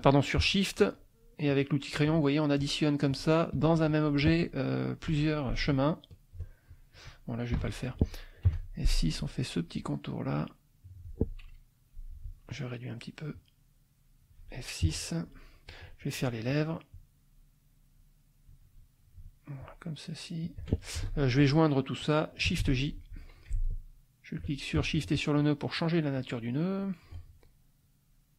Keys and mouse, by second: 0.8 shift+click, 1.5 shift+click, 2.0 shift+click, 2.6 shift+click, 3.1 shift+click, 5.1 F1, 5.6 ctrl+click, 6.7 ctrl+click, 7.5 Delete, 8.4 F6, 9.7-11.2 drag, 12.2 F2, 13.3-14.4 drag, 14.8 F6, 15.0 middle click, 16.9-18.7 drag, 19.6-20.7 shift+drag, 20.9 shift+F2, 21.0 shift+click, 22.6 shift+j, 24.9 ctrl+click, 25.7 click, 26.8 click, 27.8 click.